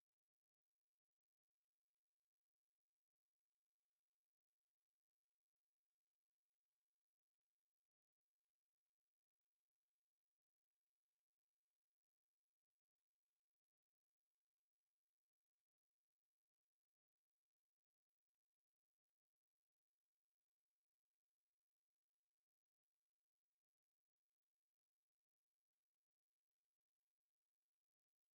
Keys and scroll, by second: 0.0 Escape, 0.9 m, 1.0 space, 1.7 Escape, 8.1 Escape, 9.3 v, 10.1 Escape, 10.9 m, 11.0 space, 12.1-14.5 typing, 12.9 F8, 15.8 Escape, 18.4 Escape, 18.5 e, 18.8 space, 19.7 2, 22.4 Escape, 23.0-24.1 typing, 23.3 KP_Divide, 26.0 2, 26.2 5, 26.8 BackSpace, 27.0 3, 27.2 KP_Divide, 28.0 5.